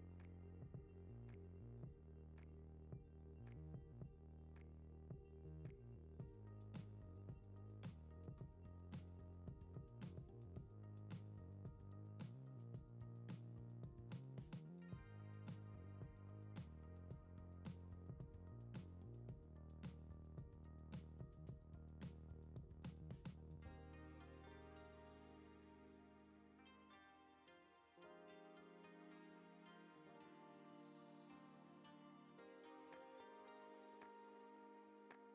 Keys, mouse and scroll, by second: 0.6 g, 1.4 click, 2.4 click, 2.5 click, 2.6 click, 3.7-4.1 scroll up 2, 4.1 scroll down 3, 4.3 click, 4.5 h, 5.1 click, 5.6 g, 7.3 ctrl+s, 7.4 click, 7.6 z, 7.8 ctrl+s, 7.9 click, 8.0 click, 8.6 click, 9.5 scroll up 1, 9.8 click, 10.8 click, 11.6-12.6 drag, 12.9 click, 13.0 click, 13.5 click, 13.6 click, 14.2 click, 14.7 click, 15.9 click, 17.3 click, 17.6 click, 18.6 click, 19.1 click, 19.5 click, 19.7 click, 20.5 click, 22.5 click, 23.0 click, 23.8 click, 28.1 click, 28.2 q, 28.8 click, 29.3 ctrl+z, 29.5 ctrl+z, 29.6 ctrl+z, 29.8 click, 30.6 click, 31.4 click, 34.4 click.